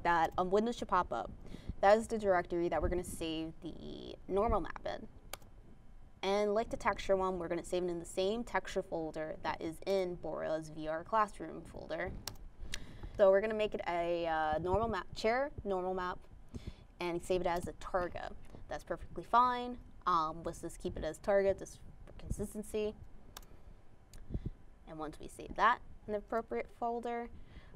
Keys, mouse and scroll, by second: 0.2 click, 0.4 click, 1.5 click, 4.0-4.4 scroll up 2, 8.4 scroll up 1, 10.7 click, 13.9-14.9 typing, 16.4-19.9 typing, 21.8 click.